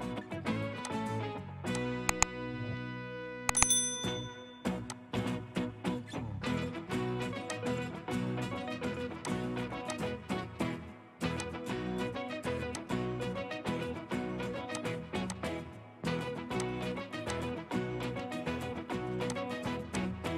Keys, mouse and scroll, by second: 3.0 Escape, 3.2 Escape, 16.1 ctrl+click.